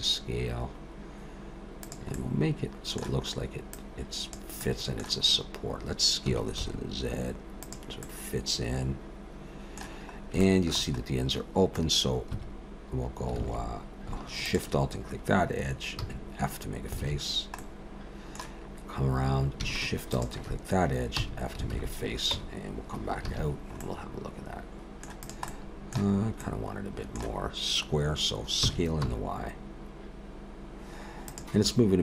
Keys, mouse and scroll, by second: 2.1 middle click, 3.7 click, 4.6 middle click, 5.3-6.3 scroll up 2, 6.3 s, 8.0 middle click, 10.2 scroll up 2, 10.4 shift+middle click, 11.2-11.6 scroll up 1, 12.3 2, 13.4 alt+a, 14.5 alt+shift+click, 16.0 f, 17.0 alt+a, 17.3 scroll down 2, 17.6 middle click, 18.6-19.5 scroll up 1, 20.1 alt+shift+click, 21.2 f, 21.7 alt+a, 22.4 Tab, 23.3 alt+a, 23.5-24.6 scroll down 2, 23.8 middle click, 25.2 click, 25.5 middle click, 26.1-26.4 scroll up 2, 26.4 middle click, 28.6 s.